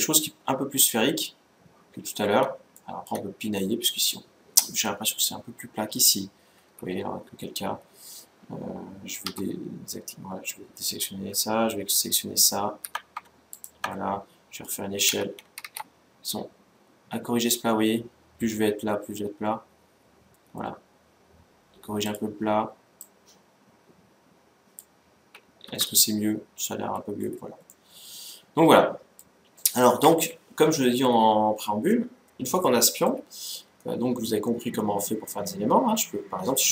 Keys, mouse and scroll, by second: 0.8-1.6 scroll up 1, 1.6-2.5 scroll up 1, 2.5-5.3 middle drag, 6.6 Tab, 9.0 a, 12.2 alt+s, 13.3-15.0 right drag, 15.0 s, 22.7-24.6 drag, 24.7 click, 25.5 Tab, 26.1-29.2 middle drag, 30.0-30.5 scroll down 1, 30.5-34.5 middle drag.